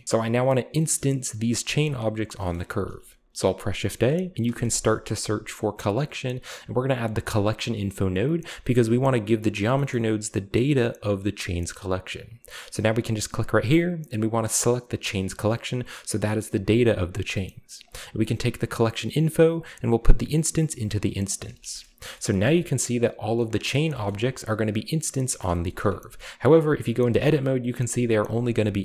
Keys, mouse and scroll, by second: 0.9-1.6 middle drag, 2.5-2.9 shift+middle drag, 2.9 shift+a, 4.4 i, 7.4 click, 8.4-9.0 drag, 9.7-10.6 middle drag, 11.5-13.1 middle drag, 13.1 click, 15.0 click, 17.1 click, 17.8 click, 19.5-20.8 drag, 21.2 click, 21.8-22.1 shift+scroll up 2, 22.1 scroll down 2, 22.3-23.2 shift+middle drag, 22.3 scroll up 1, 22.5-23.2 scroll down 1, 23.4 click, 23.9-24.4 shift+middle drag, 24.1-24.9 scroll up 1, 25.1-26.1 scroll down 3, 25.3-26.3 shift+middle drag, 26.8 right click, 27.0 g, 28.3 middle click, 28.6 g.